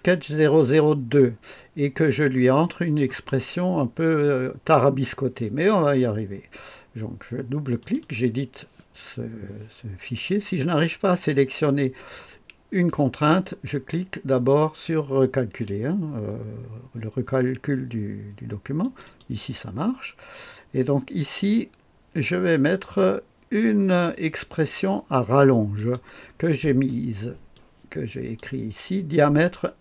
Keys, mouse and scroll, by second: 7.7 click, 18.7 click, 22.7 click, 23.9 click, 25.7 click, 27.5 click.